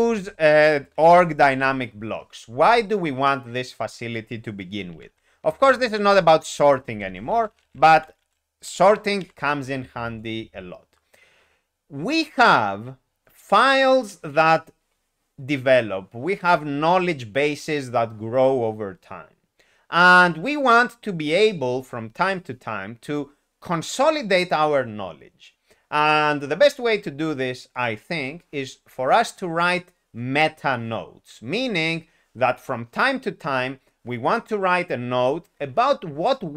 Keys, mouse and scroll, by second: 1.5 ctrl+u, 2.5 Escape, 4.7-9.1 typing.